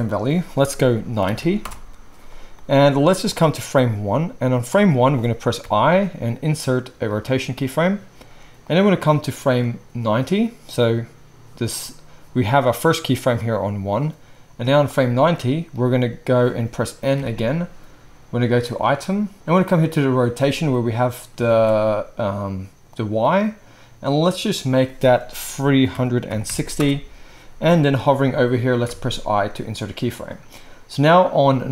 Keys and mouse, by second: 17.2 n, 19.0-19.3 middle drag, 19.3 ctrl+z, 19.3-31.7 drag, 21.4 ctrl+z.